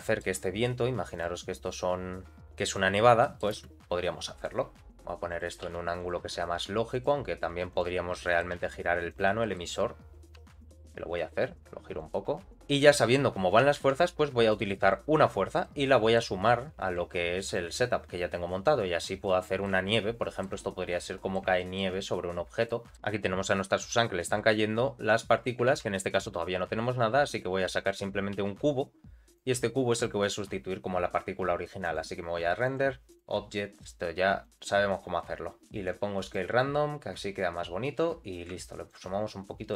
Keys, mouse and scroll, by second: 0.5 scroll up 1, 1.1 click, 1.6 scroll up 2, 2.4 scroll down 1, 2.4 space, 2.6 click, 2.9-3.4 scroll down 2, 3.2 middle click, 3.5 space, 4.7 click, 4.7 r, 5.6 g, 6.2 r, 7.7 click, 8.1 middle click, 8.5 z, 9.1 click, 9.4 middle click, 10.3 r, 12.5 middle click, 13.7 shift+a, 15.6 middle click, 16.5 g, 19.2 middle click, 19.8 shift+middle click, 20.6-21.0 scroll up 1, 21.0 middle click, 21.5 shift+middle click, 22.2-22.6 scroll down 2, 22.6 click, 22.6 middle click, 22.9 g, 23.0-23.6 scroll up 1, 23.6-23.9 scroll down 1, 24.0 shift+middle click, 25.0 click, 25.7 shift+a, 28.3 s, 29.9-30.9 drag, 30.9-31.8 scroll down 1, 31.8 click, 31.8-32.6 scroll down 1, 32.9 click, 35.9 click.